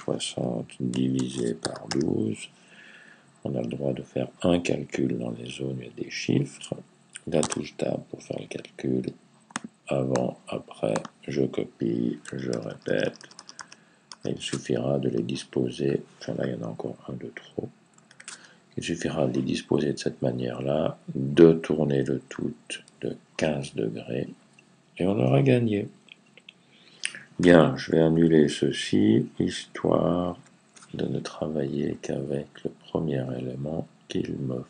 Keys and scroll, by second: 0.0-2.2 typing, 12.4 super+d, 12.5 super+d, 12.7 super+d, 12.9 super+d, 13.1 super+d, 13.2 super+d, 13.4 super+d, 13.9 super+d, 17.9 super+z, 20.1 super+z, 27.7 super+z, 27.9 super+z, 28.1 super+z, 28.3 super+z, 28.5 super+z, 28.9 super+z, 29.3 super+z, 30.2-33.0 super+z.